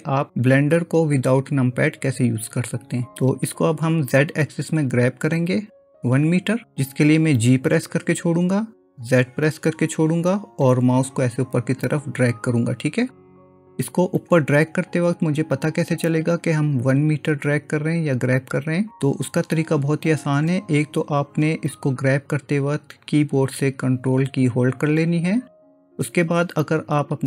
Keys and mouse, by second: 4.8-5.9 drag, 8.0 g.